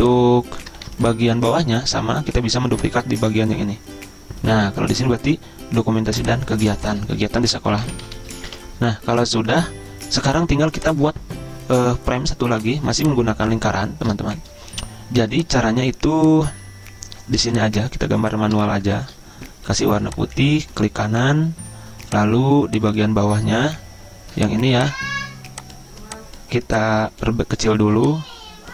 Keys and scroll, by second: 0.0-0.1 typing, 0.8 ctrl+z, 7.5-8.2 typing, 8.5 Escape.